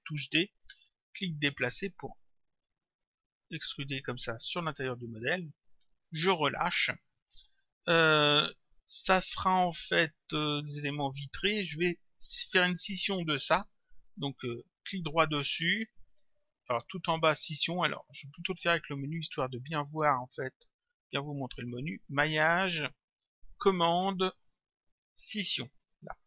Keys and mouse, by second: 1.0 click, 14.9 right click, 18.6 click, 20.6 click, 22.0 click.